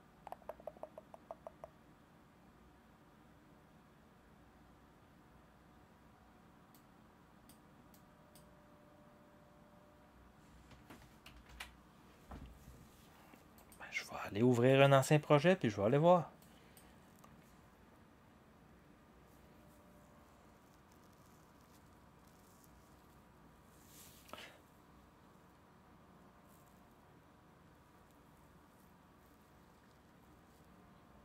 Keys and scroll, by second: 11.5 ctrl+s.